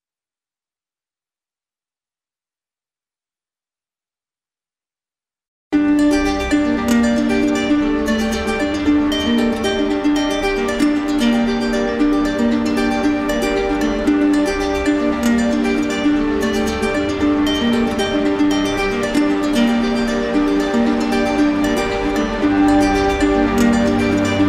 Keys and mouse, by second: 2.1 click, 5.1 click, 8.5 click, 10.7 click, 11.1 click, 11.7 click, 13.0 click, 14.2 click, 14.8 click, 20.3 click, 21.4 right click, 22.1 right click, 23.6 click.